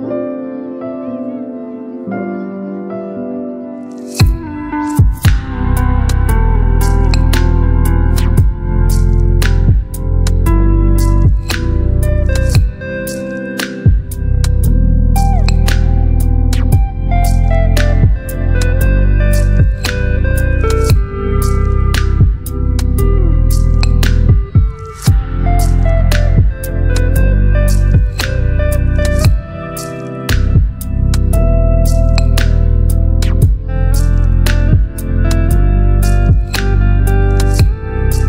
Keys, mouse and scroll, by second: 0.8 v, 2.2-5.8 drag, 8.0-10.1 shift+drag, 16.1 click, 18.5-19.9 typing, 20.0 Return, 22.8-24.5 alt+scroll up 2, 24.7 space, 24.8-26.6 click, 25.2 space, 32.0 right click, 32.7 click, 34.5 space, 35.0 click, 35.1-35.7 space, 36.2 click.